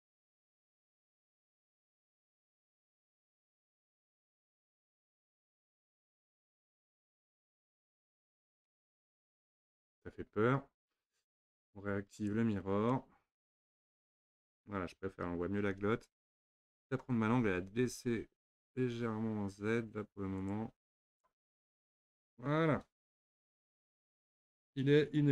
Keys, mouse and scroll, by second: 0.4 click, 1.0 g, 2.6-3.0 scroll down 3, 3.0-5.0 middle drag, 5.0 z, 9.2 click, 12.3 click, 12.9-16.0 middle drag, 16.0 Tab, 16.4 click, 18.0 g, 21.2 click, 21.6 scroll down 2, 22.0-25.3 middle drag.